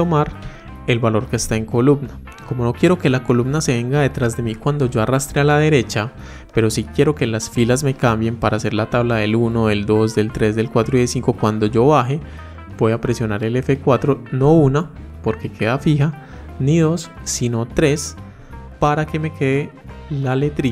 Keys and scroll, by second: 13.6 F4.